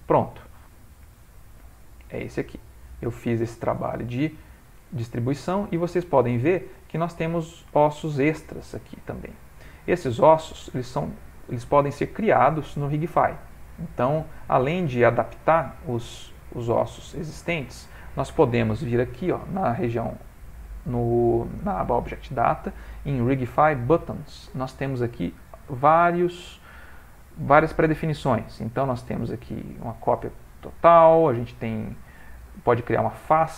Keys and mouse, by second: 1.8 click, 2.4 middle click, 3.1 middle click, 3.3 ctrl+middle click, 3.5 ctrl+middle click, 3.9 middle click, 5.1 middle click, 6.2 shift+middle click, 6.3 shift+middle click, 6.8 middle click, 8.0 shift+middle click, 8.8 click, 9.4 Tab, 9.8 middle click, 10.7 shift+middle click, 12.0 middle click, 13.2 shift+middle click, 14.2 middle click, 15.1 middle click, 15.3 shift+middle click, 19.0 middle click, 24.0 middle click, 25.4 click, 28.9 click, 29.8 click, 33.2 click.